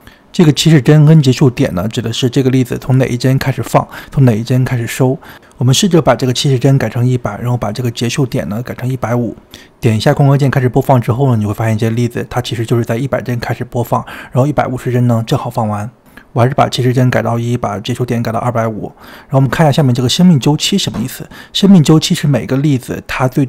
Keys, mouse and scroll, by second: 5.8 click, 6.4 KP_0, 8.0 click, 8.6 KP_0, 9.2 click, 17.5-19.0 drag, 19.7-20.9 drag, 22.4 scroll down 2, 23.0-23.4 middle drag.